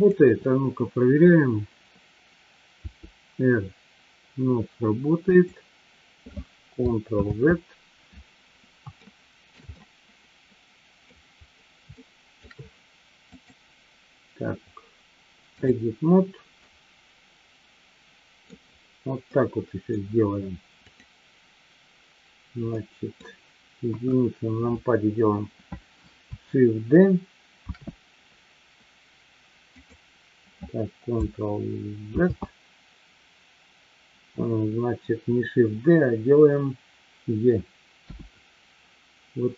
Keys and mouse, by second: 0.0-1.5 drag, 7.6 ctrl+z, 9.1-9.6 shift+middle drag, 9.7-11.1 middle drag, 12.0-12.4 shift+middle drag, 13.4-16.1 drag, 16.6-18.5 middle drag, 19.2 middle click, 20.9-21.5 drag, 22.9-23.2 middle drag, 24.0 KP_1, 27.7 shift+d, 29.6 click, 32.5 ctrl+z.